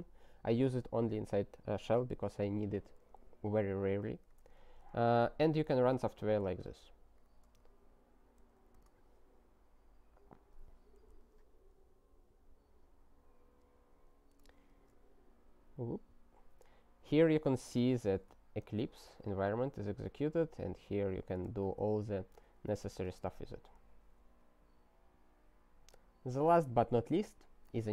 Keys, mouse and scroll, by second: 3.9 click, 4.3 ctrl+a, 4.7 ctrl+e, 5.6 alt+w, 7.1 Return, 8.4 ctrl+y, 8.8 Return, 16.4 Return, 22.1 Return, 23.1 alt+w, 24.6-25.4 scroll down 41, 26.0-26.9 scroll down 14.